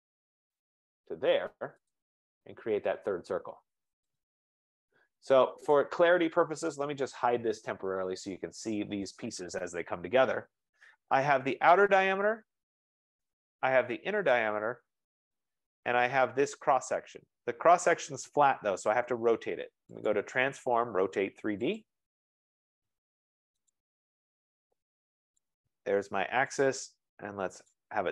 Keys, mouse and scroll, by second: 2.1 click, 4.2 click, 5.9 click, 6.8-7.8 typing, 10.5 typing, 12.1 click, 13.0 click, 13.3 F15, 14.5 click, 15.6 click, 16.7 click, 20.2 click, 21.9 click, 23.8 click, 25.6 click, 26.8 click, 27.8 click.